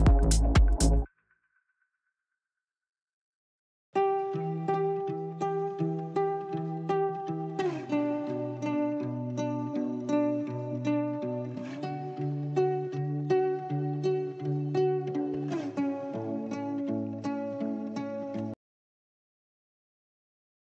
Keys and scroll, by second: 0.0 c, 15.6 Right.